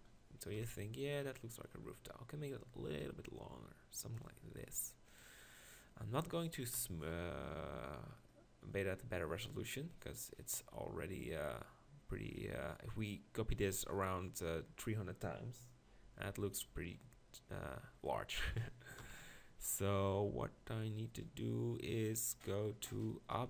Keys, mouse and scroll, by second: 0.6 KP_7, 6.8 KP_1, 10.0-11.2 middle drag, 19.0 KP_1.